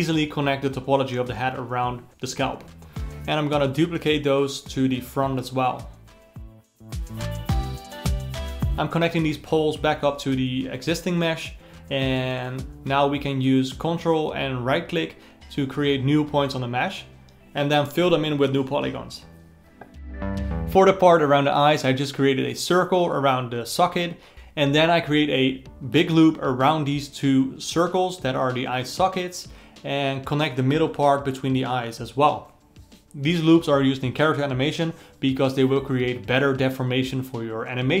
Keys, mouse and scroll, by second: 0.0-1.6 alt+middle drag, 1.6 click, 2.1 alt+middle click, 3.0 c, 3.8 shift+d, 4.6 g, 6.0 alt+middle click, 7.0 r, 8.6-10.8 typing, 9.6 ctrl+middle click, 9.8 click, 10.4 alt+middle click, 10.7 click, 11.0-12.1 alt+middle drag, 12.1 click, 12.2 g, 12.4 click, 12.6 g, 12.8 alt+middle click, 13.1 ctrl+click, 13.6 alt+m, 13.9 Down, 13.9 Down, 14.2 shift+click, 14.5 alt+m, 15.0 shift+click, 15.1 alt+m, 15.4-18.6 typing, 15.5 alt+middle click, 15.6 click, 15.7 ctrl+right click, 16.4 click, 17.3 click, 17.6 ctrl+right click, 18.1 click, 18.4 alt+middle click, 18.5 click, 18.8-19.9 alt+middle drag, 19.9 click, 20.2 alt+middle click, 20.3 alt+a, 20.6 click, 21.2-25.3 typing, 25.1 click, 26.6 click, 26.9 g, 27.8 click, 28.0 g, 29.1 click, 29.6 g, 30.4 click, 30.6 g, 31.4 3, 31.6 alt+click, 32.7 click, 33.5-37.0 typing, 35.0 alt+middle click, 37.4 alt+middle click.